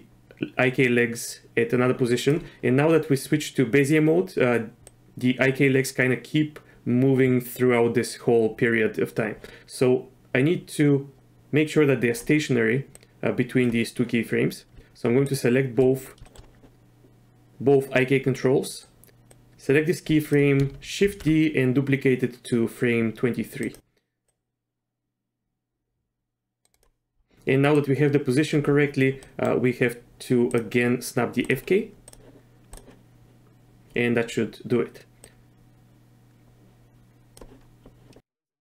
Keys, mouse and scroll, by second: 4.9-12.2 drag, 12.9 click, 15.2 shift+click, 16.2 shift+middle click, 18.8 drag, 19.1 ctrl+z, 19.3-20.3 drag, 21.1 shift+d, 24.3-26.7 drag, 27.8 click, 29.2 middle click, 30.4 click, 32.0 click, 35.2-37.4 drag.